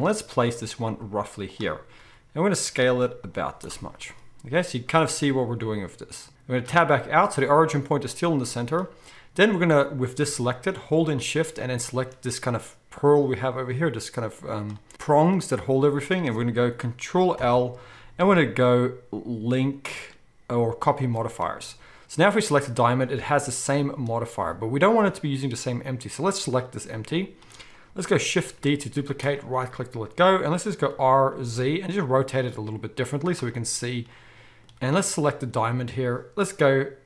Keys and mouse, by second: 0.0-1.7 drag, 0.8 s, 1.7 right click, 2.0 r, 2.8 s, 3.3 z, 6.7 Tab, 10.2-10.6 drag, 10.2 g, 10.6-11.7 shift+middle drag, 11.7-12.1 shift+drag, 12.1-22.3 middle drag, 17.4 ctrl+l, 22.3 click, 26.4 click, 28.4 shift+d, 30.9 r, 34.7-35.3 middle drag, 35.3 click, 35.4-37.0 middle drag.